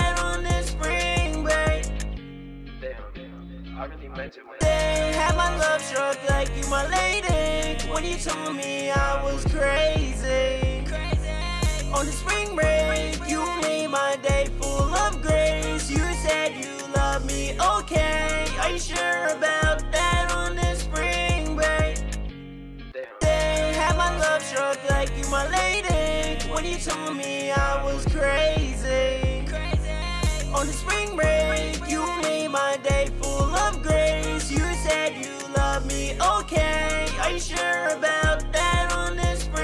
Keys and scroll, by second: 17.6 ctrl+super+w, 32.1 ctrl+super+s, 35.1 super+s, 35.7 ctrl+super+w.